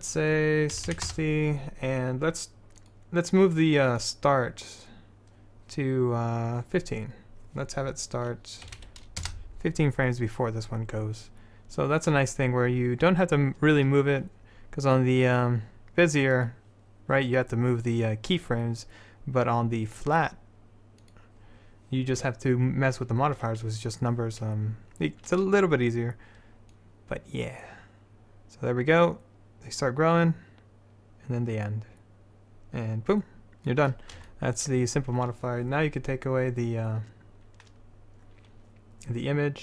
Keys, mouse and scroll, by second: 16.5-18.4 drag, 21.2-23.2 drag, 26.9-28.9 drag.